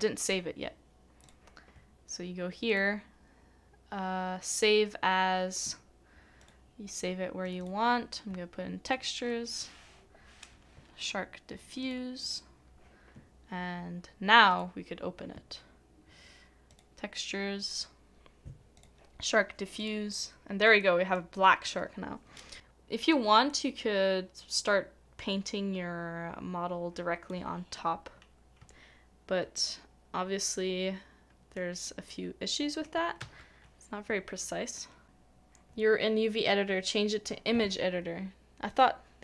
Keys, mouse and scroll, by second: 7.6 double click, 12.2 double click, 20.8 double click, 29.5 middle click, 33.2 ctrl+z.